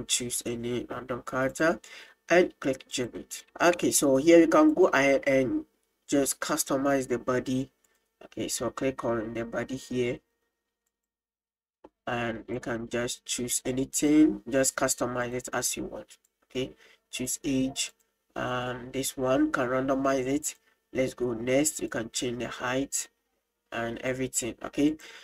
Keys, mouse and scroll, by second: 2.9 click, 4.2 middle click, 4.7 click, 7.9 click, 10.9 click, 12.6-14.2 drag, 15.3 click, 16.3-17.3 drag, 17.9 click, 20.5 click, 21.9-24.1 drag, 24.9 click.